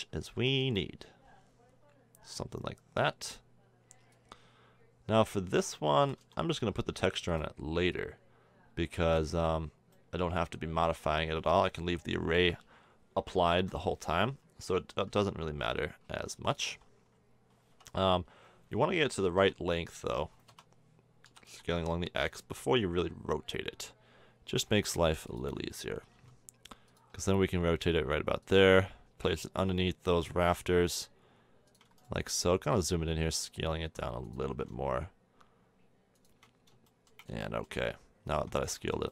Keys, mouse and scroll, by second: 0.3 s, 4.1-6.0 drag, 6.0 s, 7.9-9.5 drag, 9.9-11.8 middle drag, 12.3 KP_1, 13.5-15.2 drag, 15.2 g, 16.7 r, 21.2 s, 26.1 g, 27.1 r, 28.6 g, 30.3 r, 31.9-33.5 drag, 33.2 s, 34.5 g, 38.3 Tab.